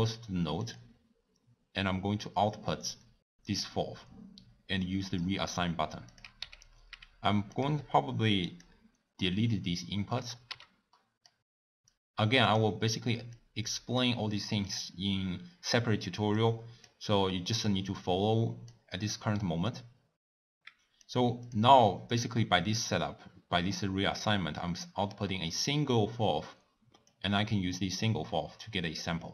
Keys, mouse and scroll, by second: 2.1 click, 5.0-9.9 drag, 12.7 click, 20.4 click, 27.3 click.